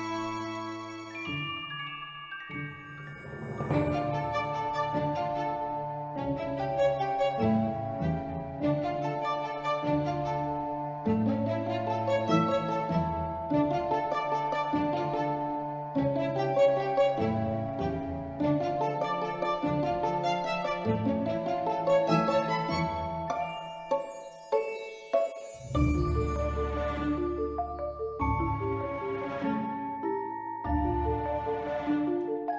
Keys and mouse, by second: 0.5 click, 3.9-5.4 drag, 5.9 click, 7.6 right click, 9.0 shift+d, 9.1 shift+Return, 10.1-11.8 drag, 12.3 Tab, 13.5 click, 15.5 click, 16.4-17.1 drag, 18.4 b, 19.2 s, 19.3 z, 19.9 click, 20.8 click, 21.5-22.2 drag, 23.2 click, 23.6 click, 23.8 b, 24.7 s, 25.5 click, 26.0 click, 26.9 s, 27.8 click, 28.6 b, 29.8 click, 30.6 click, 31.0 b, 32.1 s.